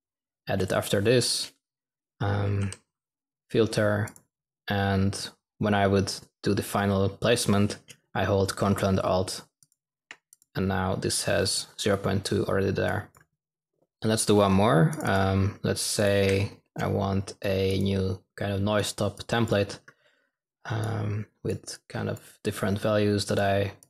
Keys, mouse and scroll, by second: 13.8 typing, 16.1 n.